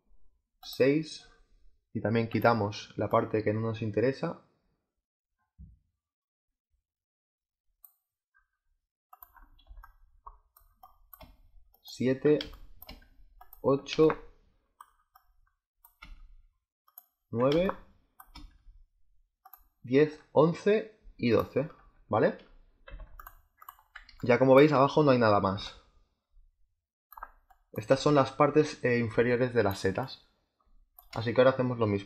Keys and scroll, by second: 9.6 space, 12.3 space, 13.8 space, 17.4 space, 22.8 z, 24.0 space, 29.0 space.